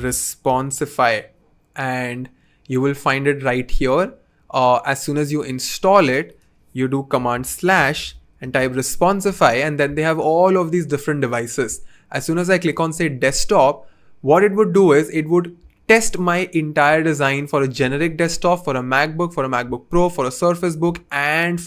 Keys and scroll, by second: 0.0-1.1 typing, 7.3 super+/, 7.4-9.0 typing.